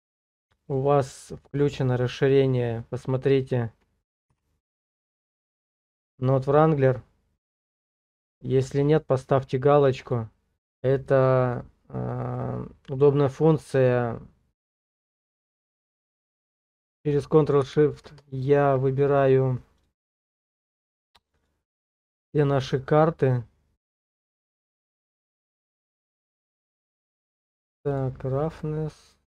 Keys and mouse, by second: 0.7-1.8 drag, 11.2 click, 17.7 ctrl+shift+t.